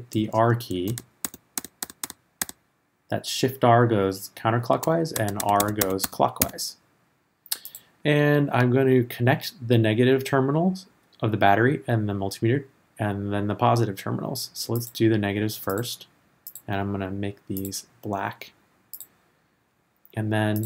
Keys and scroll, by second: 0.9 shift+r, 5.1 shift+r.